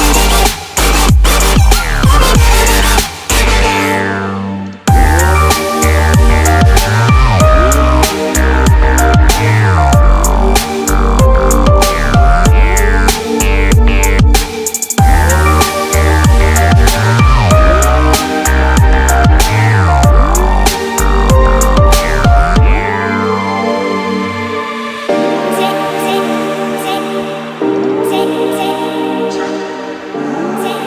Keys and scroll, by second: 26.6 Escape.